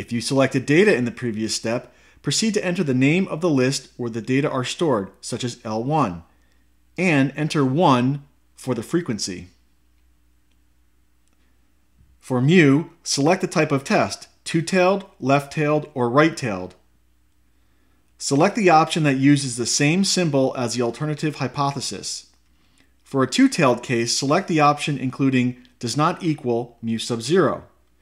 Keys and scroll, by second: 6.4 1, 8.2 Return, 10.0 Return.